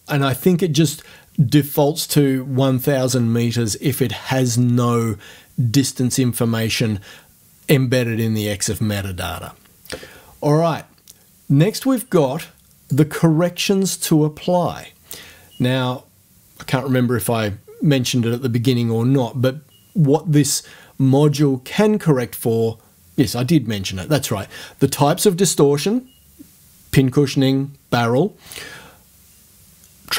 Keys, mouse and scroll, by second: 12.9 click.